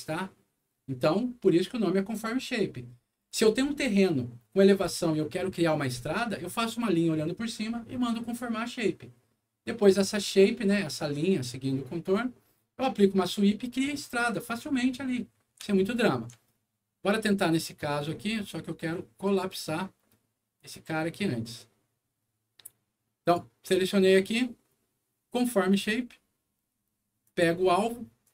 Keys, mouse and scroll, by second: 15.3 scroll up 2, 15.7 alt+middle click, 17.6 alt+middle click, 19.2 alt+click, 20.5 click, 22.2 middle click, 23.2 click, 25.3 click, 27.2 click, 28.2 click.